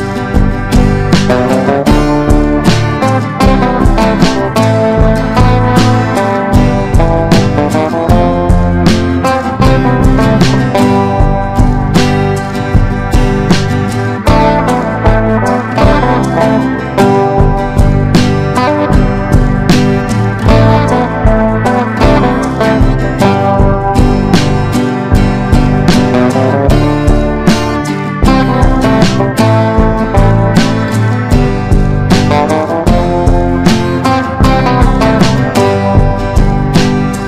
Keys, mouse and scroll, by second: 0.6 click, 4.4 F4, 5.0-14.8 drag, 15.3 ctrl+g, 16.2 ctrl+click, 18.2 click, 19.7 Down, 20.1 Down, 20.1 typing, 24.9 click, 28.6-29.6 drag, 29.6 click, 30.8 ctrl+g, 32.4-34.6 drag, 34.7 Down, 35.0 Down, 35.2 Down, 35.4 Down.